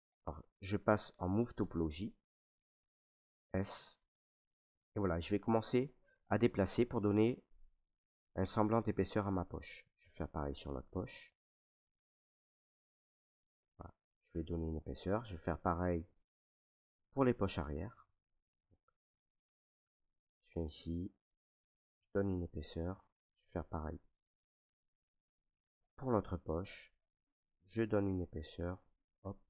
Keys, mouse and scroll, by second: 0.0 click, 1.7 click, 3.0 s, 3.8 click, 5.0 click, 5.7 right click, 6.7 click, 9.1 click, 9.7 alt+right click, 10.5 click, 11.0 alt+right click, 12.2 right click, 13.6 click, 14.8 click, 15.3 alt+right click, 16.8 click, 16.8 right click, 17.3 alt+right click, 18.1 right click, 18.8 right click, 19.0 alt+right click, 19.6 right click, 19.6 alt+right click, 19.7 click, 19.9 alt+right click, 19.9 click, 20.3 alt+right click, 20.4 alt+right click, 22.0 right click, 22.8 alt+right click, 24.0 right click, 24.9 right click, 25.1 alt+right click, 25.5 alt+right click, 26.0 right click, 27.8 click, 28.6 click, 28.8 ctrl+z.